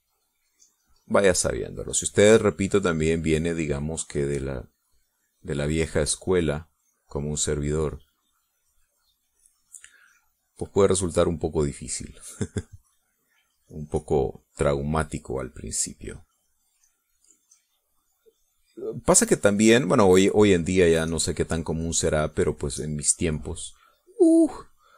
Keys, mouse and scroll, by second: 12.6 click, 13.4 middle click, 14.7 click, 15.1-20.5 drag, 20.8-24.9 drag.